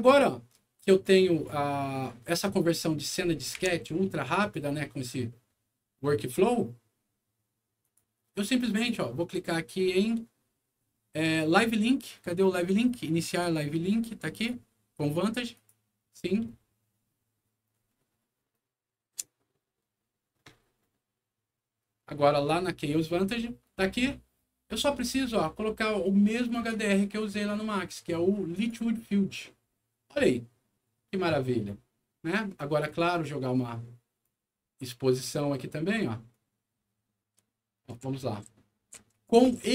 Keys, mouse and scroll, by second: 0.8 right click, 2.2 click, 3.0 scroll down 1, 3.5 c, 4.1 click, 4.3 click, 6.1 click, 7.7 click, 8.6 click, 14.3 click, 15.4 click, 22.2 click, 24.9 click, 26.4 click, 28.4 click, 32.8 click, 34.1-35.9 drag, 36.2-39.7 right drag, 37.3 w, 37.8 d, 38.4 s, 39.5 s.